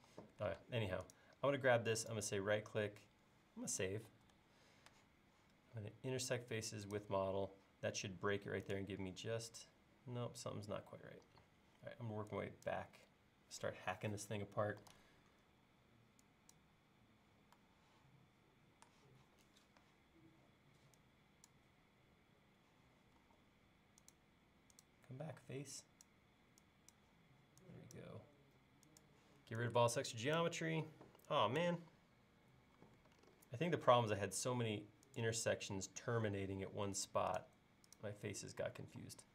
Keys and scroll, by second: 0.1 e, 0.6 space, 4.1 super+s, 11.3 e, 14.9 super+z, 23.3 l, 25.3 e, 32.8 l, 36.0 l, 38.9 e.